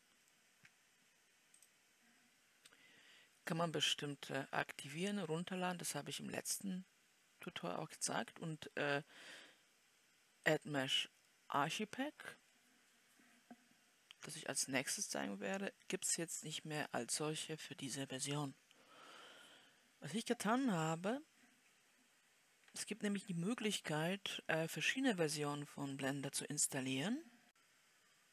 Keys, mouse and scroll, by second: 22.3-27.5 drag.